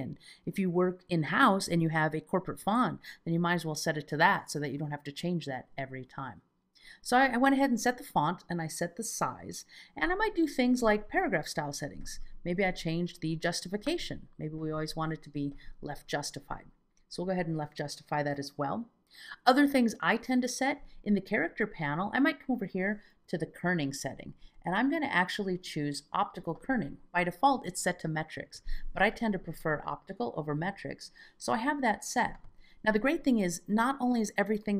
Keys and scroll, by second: 24.4 alt+z, 30.7 alt+z.